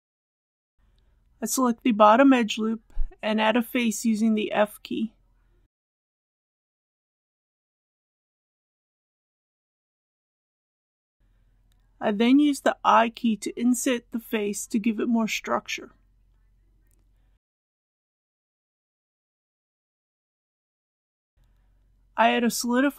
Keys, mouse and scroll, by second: 1.2 shift+2, 3.6 alt+click, 5.0 click, 6.4 alt+click, 8.8 f, 10.3 middle click, 11.5-12.1 shift+scroll down 1, 12.1 shift+scroll, 12.6 shift+3, 13.6 shift+i, 16.8 click, 17.5 KP_1, 19.0 click.